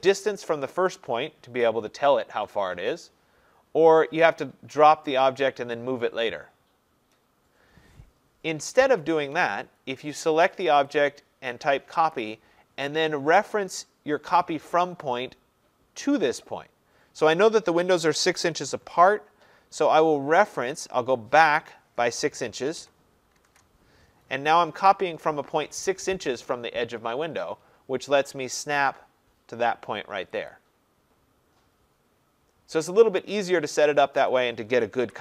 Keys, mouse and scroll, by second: 9.4 Escape, 10.3 click, 10.9 click, 12.2 click, 13.3 middle click, 13.4 middle click, 22.8 6, 23.4 shift+', 23.5 Return, 30.6 click, 31.8 scroll, 33.2 Escape, 33.9 click, 34.5 click, 35.1 Delete.